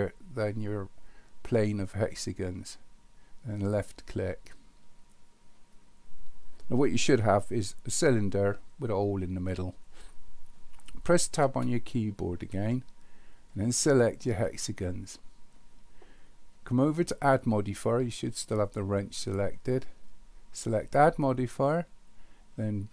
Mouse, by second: 20.8-22.9 drag.